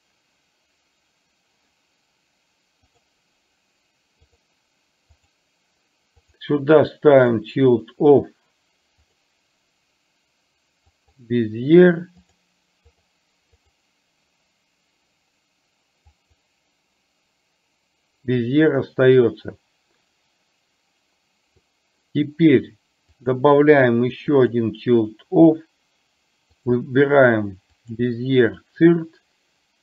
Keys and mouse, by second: 5.1 click, 6.2-7.5 drag, 9.2-11.2 drag, 12.4 click, 16.1 click, 23.2-24.6 drag, 26.6-28.0 drag.